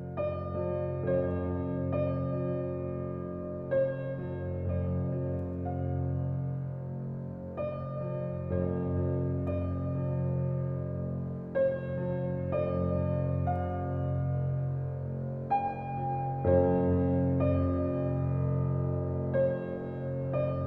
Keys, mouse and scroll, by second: 0.4-1.2 scroll up 1, 1.2 click, 1.6 scroll down 1, 3.2-4.2 scroll up 1, 5.7-7.7 scroll down 1, 10.4-11.2 scroll up 1, 11.2-12.6 drag, 12.6-13.2 scroll down 1, 16.7 scroll up 1, 17.7 click, 18.5-18.8 typing.